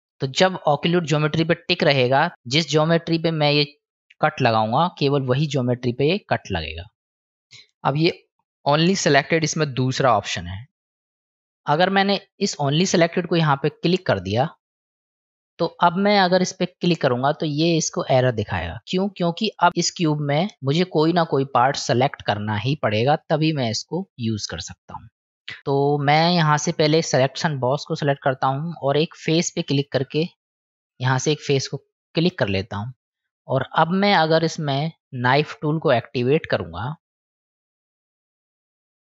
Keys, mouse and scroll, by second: 6.0-7.2 middle drag, 13.0 click, 14.0 middle click, 16.8-17.1 drag, 17.5-18.2 drag, 18.8 click, 19.7-22.3 middle drag, 27.1 click, 29.3 click, 31.0-33.1 middle drag, 38.4 click.